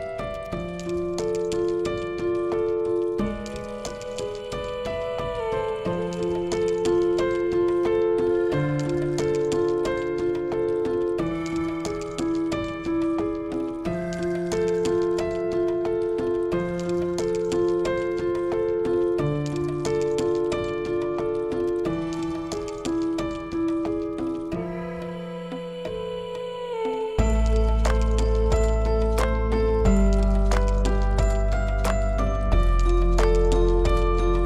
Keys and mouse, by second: 2.7-3.1 shift+middle drag, 10.0 click, 10.2 middle click, 11.3 Tab, 16.4 click, 18.9 click, 27.5 Tab, 32.7 ctrl+r.